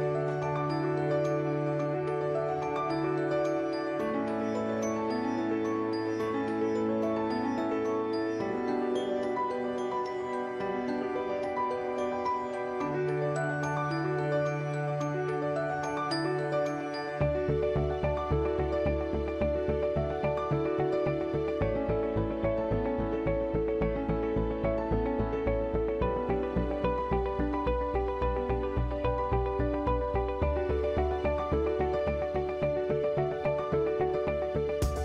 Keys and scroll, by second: 4.5 ctrl+t, 14.5 ctrl+alt+t, 19.6 Return, 20.8 ctrl+alt+shift+t, 25.4 ctrl+e, 27.1 alt+l, 29.0 ctrl+a.